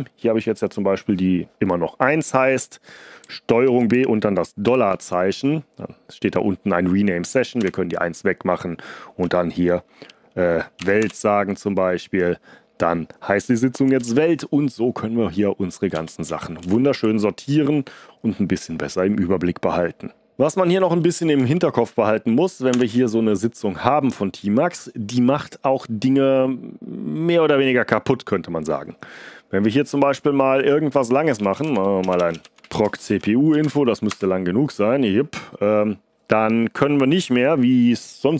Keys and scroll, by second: 3.6 ctrl+b, 4.6 $, 7.5 BackSpace, 10.5-11.4 typing, 13.7 ctrl+b, 13.9 s, 15.9 Down, 16.2 Up, 16.5 Down, 16.9 Up, 21.3 Up, 22.6 Return, 31.0-33.5 typing, 33.5 Tab, 34.0 Return.